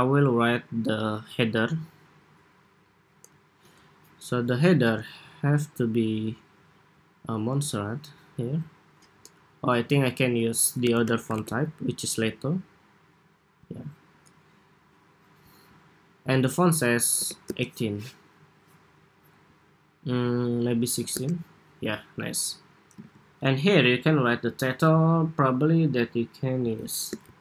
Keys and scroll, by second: 22.7 super+a.